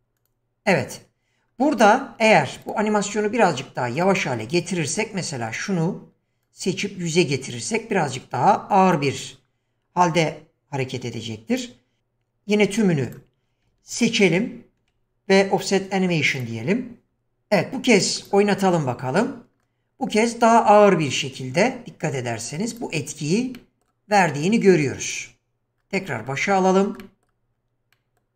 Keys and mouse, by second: 0.2 click, 4.0 click, 5.5 click, 6.4-9.0 drag, 11.5 click, 12.6 q, 18.2 click, 22.7 click, 23.6-23.9 middle drag, 24.8 click, 26.1 middle click, 27.0 middle click, 27.9-28.2 middle drag.